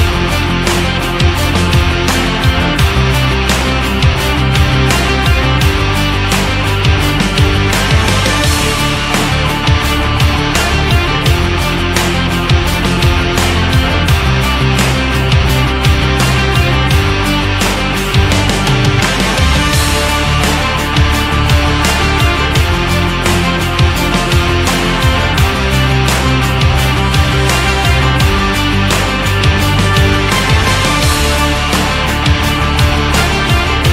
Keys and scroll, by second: 16.3 Down, 18.2 Up, 26.4 shift+Up, 27.2 Up, 27.8 shift+Up.